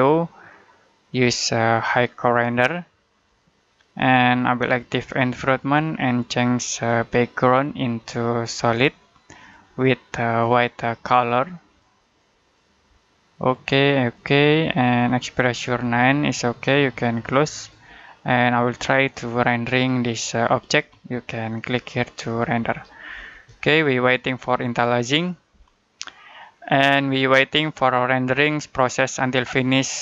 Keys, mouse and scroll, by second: 17.4 click, 18.1 middle click, 21.4 click.